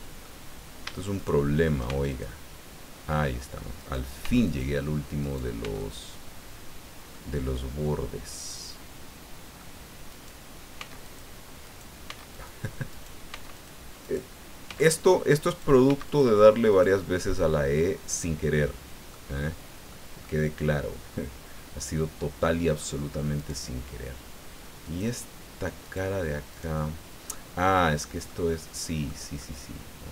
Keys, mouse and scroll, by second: 1.1 shift+right click, 1.8 shift+x, 2.1 shift+click, 3.8 right click, 4.2 x, 4.4 click, 5.2 right click, 5.6 x, 5.8 click, 7.1-9.7 drag, 10.1 right click, 10.8 x, 11.0 click, 11.6 right click, 12.1 x, 12.3 click, 12.9 right click, 13.3 x, 13.5 click, 14.0 right click, 14.7 x, 14.9 click, 15.5 right click, 15.9 x, 16.1 click, 16.7 right click, 17.3-18.9 middle drag, 19.1 middle click, 20.2-22.9 middle drag, 23.3 right click, 24.8 click, 25.8 right click, 26.5 right click, 27.3-28.4 drag, 28.5 click, 29.4-30.1 drag.